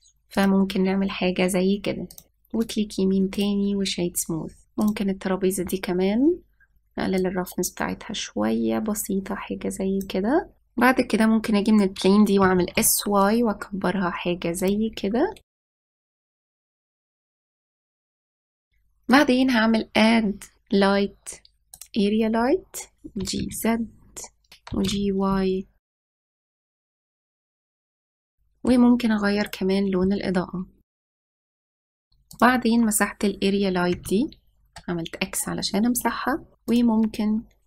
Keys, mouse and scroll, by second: 2.3-2.8 scroll down 4, 2.8-3.1 scroll up 1, 3.4-4.7 right drag, 5.7 click, 8.0-10.6 drag, 13.3 s, 15.8 scroll up 1, 15.9 shift+middle click, 16.2 click, 18.6 click, 18.9 ctrl+s, 20.0-21.3 drag, 24.1 g, 25.6 g, 28.5-30.4 middle drag, 30.4 click, 31.5 click, 33.2 click, 34.9 x, 36.1-36.6 scroll up 2.